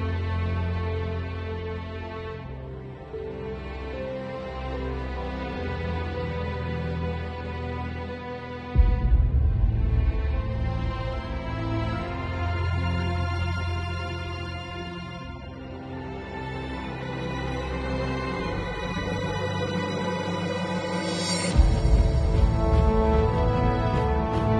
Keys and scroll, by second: 0.0-1.8 typing, 0.4 Tab, 2.4 Home, 15.9 super+t, 16.7 alt+super+t, 20.6 super+t.